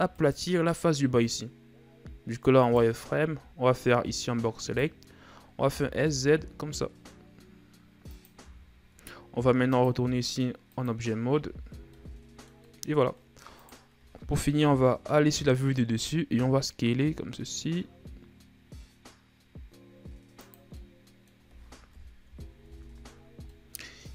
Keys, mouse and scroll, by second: 0.7 right click, 3.1 right click, 3.7 b, 6.2 s, 8.9 Tab, 10.2-11.9 drag, 11.9 a, 12.2 scroll down 3, 12.4-13.6 middle drag, 13.6-14.1 scroll up 2, 14.1 right click, 15.1 KP_7, 16.8 s, 21.3-22.4 middle drag, 22.4 KP_1, 22.7 a, 24.0 middle click.